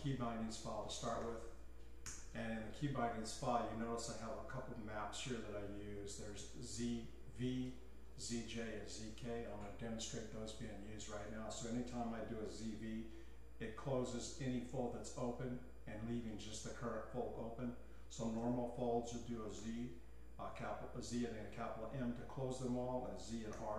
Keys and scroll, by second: 0.8-2.0 typing, 2.0 Return, 7.4 k, 12.5-13.3 typing, 18.4 z, 19.6 shift+m, 23.2 typing.